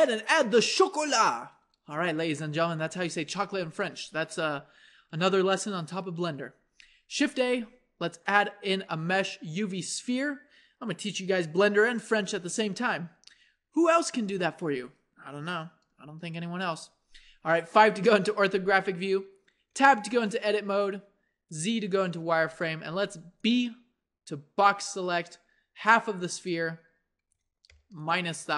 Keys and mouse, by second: 7.2 shift+a, 16.1 KP_1, 17.3 KP_5, 19.7 Tab, 20.4 z, 21.9 a, 23.2 b, 28.0-28.5 drag.